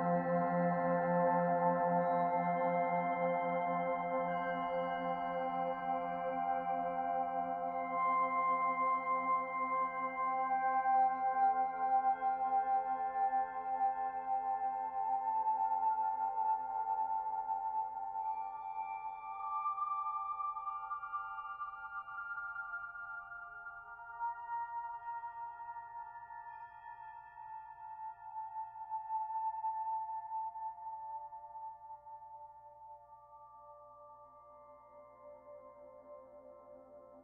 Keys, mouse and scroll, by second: 0.8 shift+middle click, 3.5-3.9 scroll up 3, 4.0 shift+middle click, 4.5 middle click, 5.0 Tab, 5.5-6.7 scroll up 1, 6.7-7.0 scroll up 1, 7.5 ctrl+r, 10.9 click, 11.9 middle click, 12.7-14.0 scroll up 1, 14.5 middle click, 18.2 click, 18.5 alt+click, 19.3 click, 23.9 click, 25.0 click, 26.8 e, 29.1 KP_1, 29.8-30.2 scroll up 1, 30.9 click, 32.7 middle click, 33.7 middle click, 36.9 e.